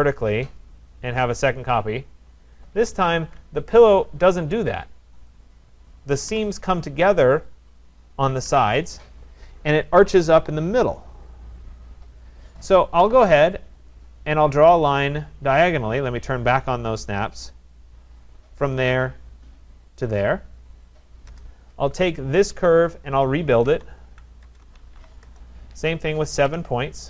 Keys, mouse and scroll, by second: 0.6 click, 1.5 click, 2.8 Escape, 2.8-3.6 typing, 3.8 click, 5.3 click, 6.3 Delete, 7.8 click, 8.4 Delete, 13.9 click, 17.1 click, 18.3 click, 20.0 click, 21.3 Return, 22.9 click, 23.4-26.4 typing, 26.4 Return.